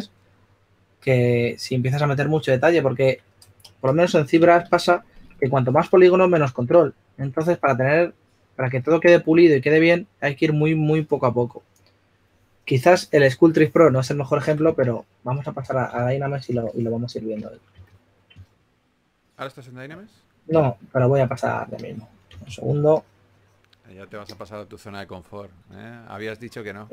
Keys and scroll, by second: 4.9 shift+f, 14.5 typing, 17.1-18.2 typing, 22.3 4, 25.6-26.3 typing.